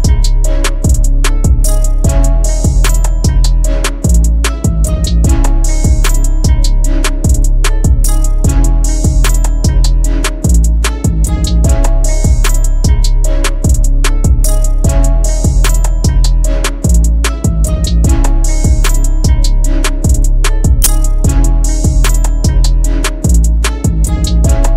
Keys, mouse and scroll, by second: 3.1 right click, 5.1-5.7 typing, 13.9 double click, 20.9-21.5 scroll up 1, 21.5-22.3 scroll down 1.